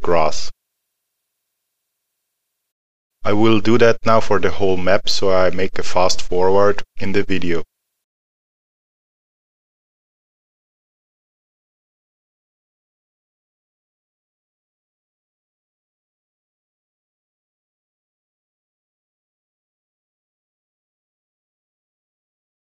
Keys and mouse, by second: 0.0 alt+middle click, 8.1 click, 8.4 alt+middle click, 9.0 middle click, 9.1 click, 9.5 alt+middle click, 9.6 click, 9.9 alt+middle click, 10.0 click, 10.4 alt+middle click, 10.5 click, 10.7 alt+middle click, 10.9 click, 11.2 alt+middle click, 11.4 click, 11.5 alt+middle click, 11.7 click, 12.2 middle click, 12.3 click, 12.6 middle click, 12.7 click, 12.9 alt+middle click, 13.0 click, 13.5 middle click, 13.5 click, 13.8 middle click, 13.9 click, 14.3 click, 14.5 middle click, 14.7 click, 15.0 alt+middle click, 15.1 click, 15.3 middle click, 15.9 alt+middle click, 16.1 click, 16.3 alt+middle click, 16.8 click, 17.3 alt+middle click, 17.4 click, 18.0 alt+middle click, 18.2 middle click, 18.5 click, 18.9 middle click, 18.9 click, 19.2 alt+middle click, 19.6 click, 19.9 middle click, 20.0 click, 20.5 alt+middle click, 20.7 click, 21.1 click, 21.4 alt+middle click, 21.5 click, 21.7 middle click, 22.2 alt+middle click, 22.3 click, 22.5 middle click, 22.5 click.